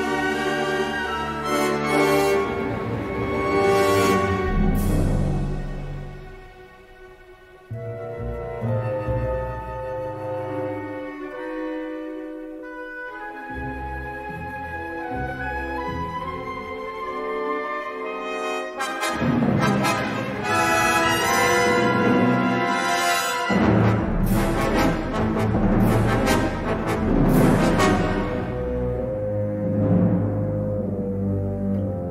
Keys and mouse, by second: 0.0 middle click, 0.8 click, 1.1 e, 3.3 middle click, 4.6 3, 6.0 middle click, 6.7 middle click, 7.2 middle click, 8.7 g, 10.0 middle click, 11.1 s, 14.1 click, 14.3 s, 16.5 3, 17.8 i, 19.4 e, 23.2 middle click, 24.3 ctrl+r, 26.0 ctrl+r, 27.3 ctrl+r, 28.3 3, 29.0 alt+shift+click, 30.6 e, 31.2 s.